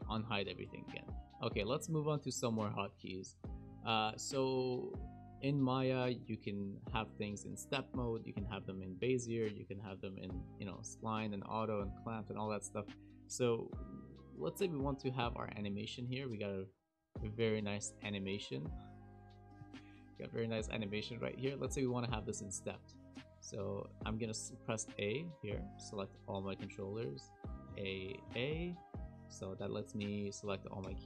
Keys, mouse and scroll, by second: 1.2 shift+middle click, 1.2 scroll down 5, 1.6 shift+middle click, 2.4 shift+middle click, 16.8 click, 24.2 a, 25.1 click, 25.5 a, 27.7 a, 28.3 a, 30.8 t.